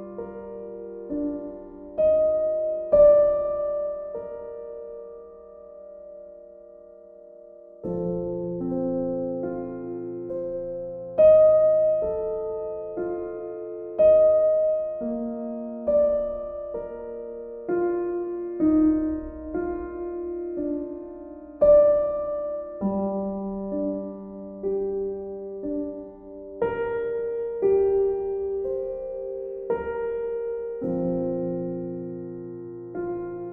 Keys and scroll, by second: 19.2 shift+F5.